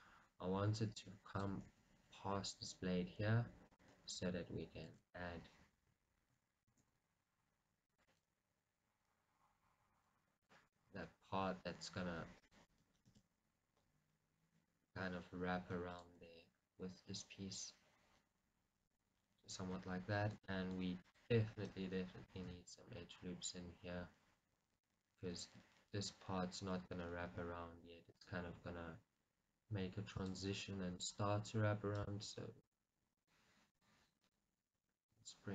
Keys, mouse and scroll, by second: 1.7 click, 2.1 g, 4.0 click, 5.0 ctrl+r, 10.8 click, 11.3 r, 12.8 click, 13.5 s, 16.2 click, 16.3 g, 19.2 click, 22.0 right click, 22.9 g, 28.3 click, 30.3 click, 31.2 click, 33.3-35.5 drag.